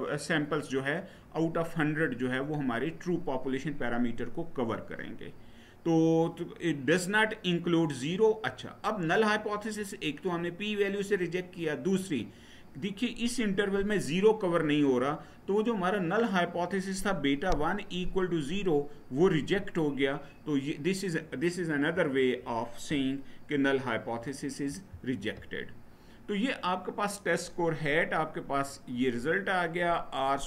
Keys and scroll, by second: 24.4 Down.